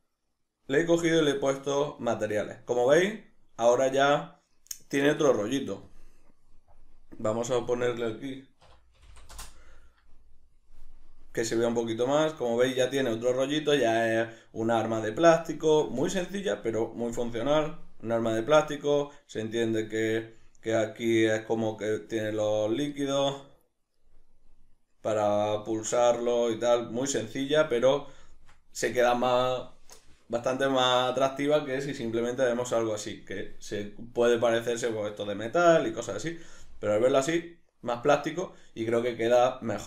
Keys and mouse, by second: 2.0-5.9 middle drag, 5.9 drag, 7.7-21.5 drag, 9.1 0, 9.4 Return, 21.5-27.7 middle drag, 32.0 z, 36.6-39.8 middle drag, 36.6 z.